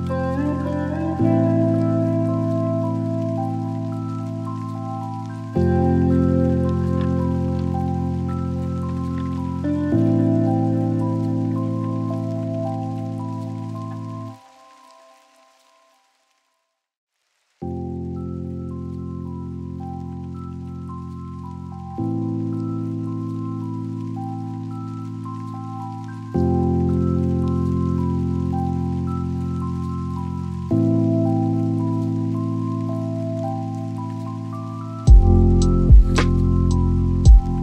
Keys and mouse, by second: 2.9-6.2 drag, 7.8 n, 9.7 click, 13.3 click, 22.0 click, 23.6 shift+a, 29.4 g, 29.9 z, 31.3 click, 32.6 s.